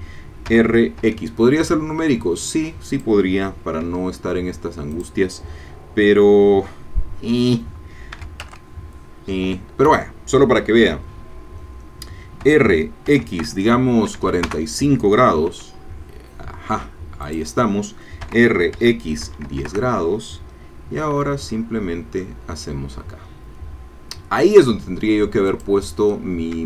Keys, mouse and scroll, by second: 0.5 r, 1.0 x, 2.9 click, 3.8 e, 4.9 click, 8.1 r, 8.4 x, 9.5 Escape, 12.4 r, 13.1 x, 14.1 KP_4, 14.2 KP_5, 14.5 KP_Enter, 15.5 e, 17.3 click, 18.2 r, 18.7 x, 19.2 KP_1, 19.5 KP_0, 19.7 KP_Enter, 21.1 e, 25.5 click, 25.8-26.6 middle drag.